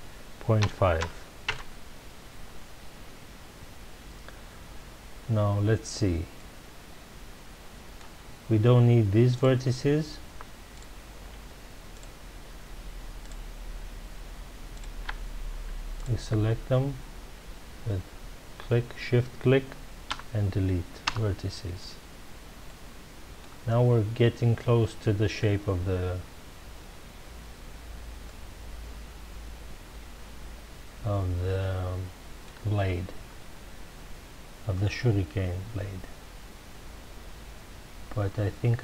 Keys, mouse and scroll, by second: 1.5 KP_Enter, 6.3-9.3 middle drag, 9.3 click, 10.7 shift+click, 11.9 shift+click, 13.2 shift+click, 14.7 shift+click, 15.9 shift+click, 20.1 Delete, 22.2 Return, 22.6-24.2 middle drag, 24.2-24.9 scroll down 1, 28.2-31.4 shift+middle drag, 33.1-34.2 scroll up 2, 34.2-35.6 scroll up 1.